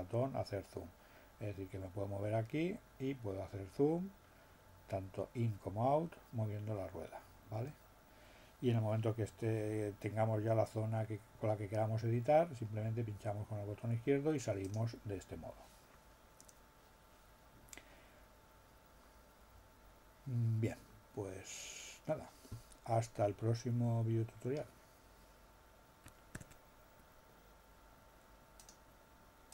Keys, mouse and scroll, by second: 2.9 scroll down 2, 3.9-4.3 scroll up 2, 5.5 scroll down 2, 14.7 click, 26.4 alt+l.